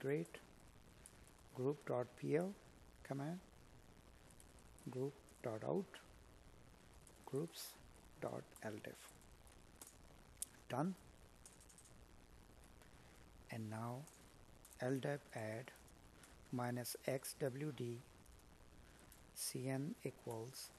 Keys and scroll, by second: 5.8 space, 8.3 space, 17.9 space, 18.4 space.